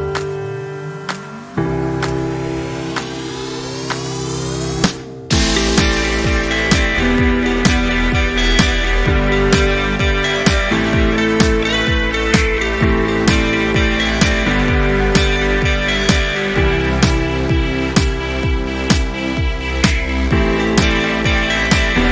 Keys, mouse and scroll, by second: 0.5 v, 0.9 click, 1.4 ctrl+c, 1.5 click, 2.0 ctrl+shift+v, 2.4 z, 2.8-3.4 alt+click, 3.9 v, 4.4-7.3 drag.